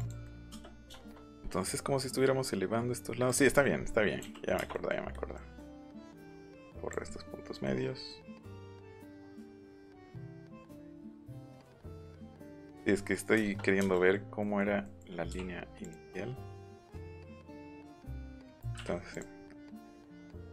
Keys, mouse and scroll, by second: 0.2 middle click, 0.4 scroll up 1, 0.6 scroll down 1, 0.8 shift+middle click, 3.2 click, 3.4 middle click, 4.3 middle click, 4.7 middle click, 5.1 middle click, 5.5 middle click, 5.9 e, 6.0 click, 6.3 click, 7.6 middle click, 8.5 click, 9.0 middle click, 10.3 click, 11.3 click, 11.9 click, 12.4 middle click, 12.9 middle click, 13.0 middle click, 13.4 shift+middle click, 15.8 click, 16.9 click, 18.2 click, 18.4 middle click, 19.0 click, 20.0 click.